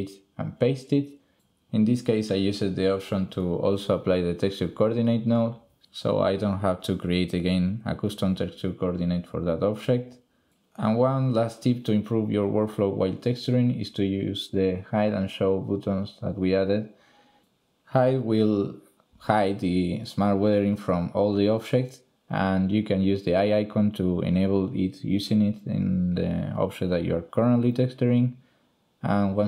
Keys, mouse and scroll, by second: 0.9-2.5 drag, 3.4 middle drag, 4.2 middle click, 15.9 click, 19.9 shift+click, 21.4 click, 22.7 shift+click, 23.9 click.